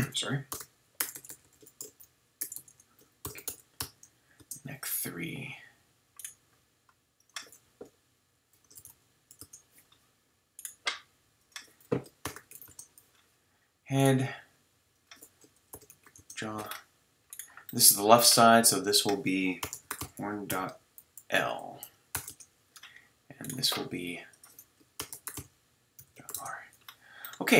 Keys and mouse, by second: 0.0-1.3 typing, 2.5 BackSpace, 2.7 BackSpace, 18.7-20.6 middle drag, 20.6-23.4 drag, 23.4-24.3 right drag, 27.2-27.5 middle drag.